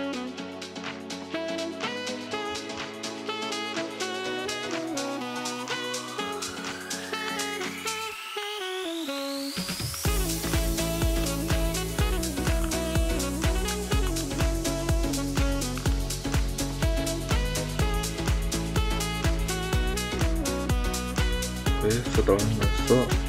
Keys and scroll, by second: 1.5 ctrl+v.